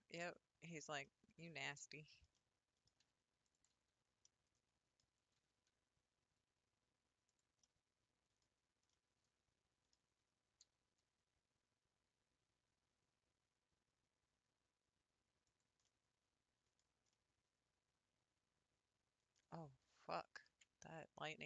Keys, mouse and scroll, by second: 0.2-3.5 middle drag, 3.9 scroll up 2, 4.3-5.4 middle drag, 5.4 g, 7.6 middle click, 8.4 scroll down 2, 8.9-10.2 middle drag, 10.2 scroll up 3, 10.6 s, 15.8 middle click, 16.8 scroll down 4, 17.1-21.0 middle drag, 21.0 scroll up 4.